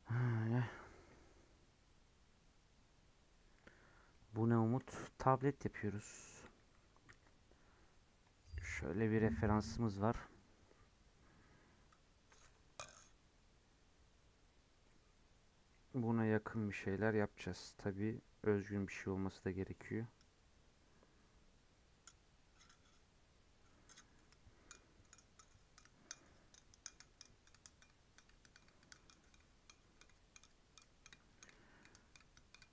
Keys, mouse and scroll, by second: 3.8 scroll down 3, 4.0 middle click, 4.4 scroll up 6, 4.6-9.1 middle drag.